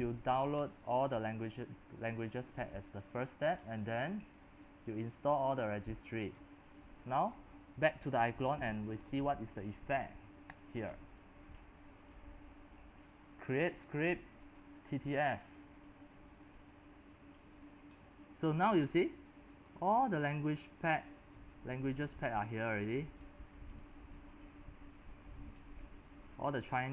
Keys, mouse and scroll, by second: 0.0-4.0 middle drag, 0.0 scroll up 3, 0.2 scroll down 1, 1.4 scroll, 4.0-22.7 drag, 22.8-24.0 drag, 24.0-24.4 scroll down 5, 24.4-26.9 scroll up 7.